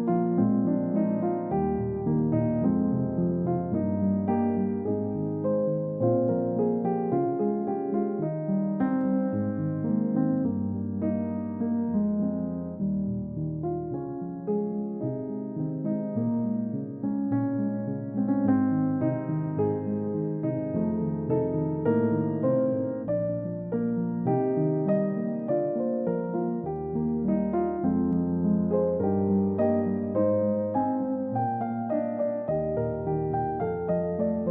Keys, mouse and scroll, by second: 4.9 double click, 21.7 shift+click, 25.7 shift+click, 28.2 shift+click.